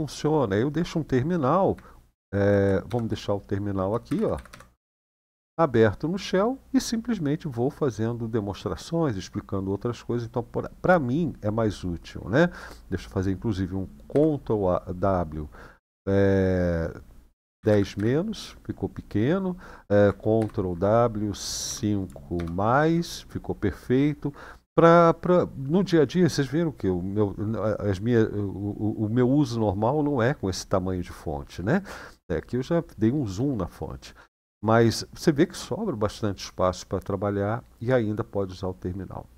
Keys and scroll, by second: 2.7 shift+;, 3.8-4.2 typing, 4.5 Return, 7.3 typing, 13.9 ctrl+w, 17.4-17.7 typing, 20.1 ctrl+w, 21.2-22.1 typing.